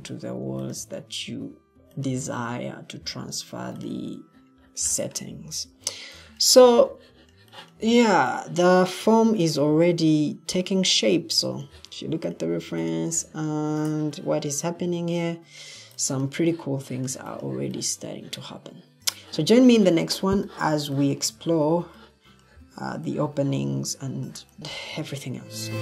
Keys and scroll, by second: 5.6 o.